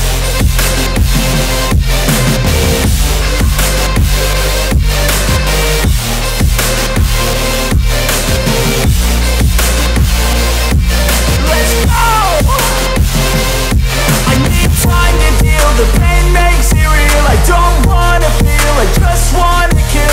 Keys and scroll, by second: 1.3 space, 5.1 space.